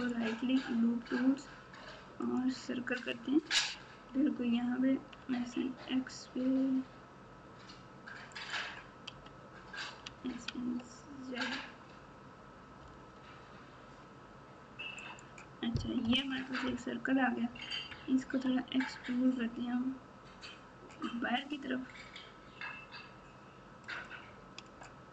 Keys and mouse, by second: 0.0-2.4 right drag, 4.3 s, 9.1 s, 16.0 KP_4, 16.3 KP_4, 18.2 e.